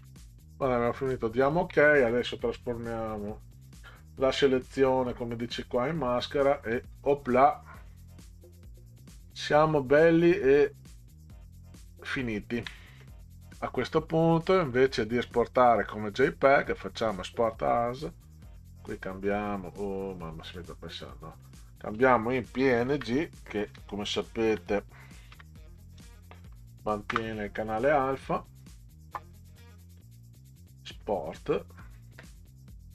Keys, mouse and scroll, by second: 0.0 Return, 3.1 click, 5.9 click, 6.9-7.2 ctrl+scroll down 4, 7.8 ctrl+scroll down 2, 8.9 ctrl+scroll down 2, 9.9 ctrl+scroll up 2, 10.6 ctrl+scroll up 2, 12.1 ctrl+scroll down 2, 14.6 click, 17.1 click, 20.5 click, 22.8 Delete, 23.7-26.4 typing, 27.1 Return, 31.3 click.